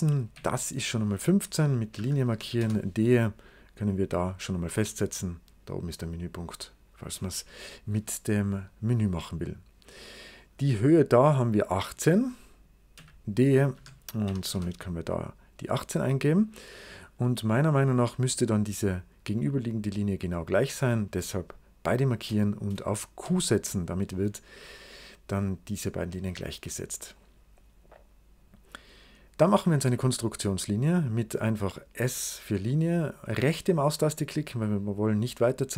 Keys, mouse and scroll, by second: 0.0 click, 0.2 d, 1.8 1, 2.1 5, 2.5 Return, 3.6 click, 9.7-11.5 scroll up 2, 12.4 click, 12.8 d, 13.6 1, 14.1 8, 14.4 Return, 18.8 click, 19.6-20.6 scroll up 2, 20.4 click, 22.0 click, 23.1 q, 26.4 scroll down 2, 27.0-28.6 right drag, 28.9 scroll up 2, 29.7 s, 30.3 click, 34.5 right click.